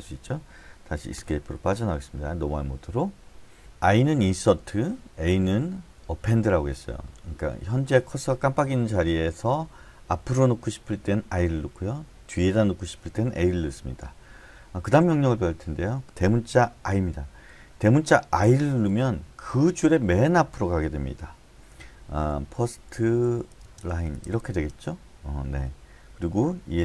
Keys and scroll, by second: 1.1 Escape, 18.4 shift+\, 22.2-24.8 typing.